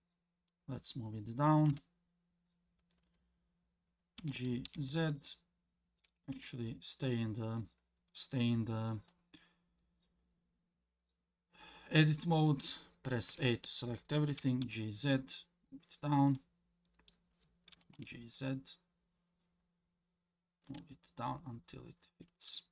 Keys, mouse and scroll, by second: 1.7 KP_1, 4.2 g, 6.3 Tab, 13.3 a, 14.4 g, 16.3 middle click, 17.7 g, 22.5 Tab.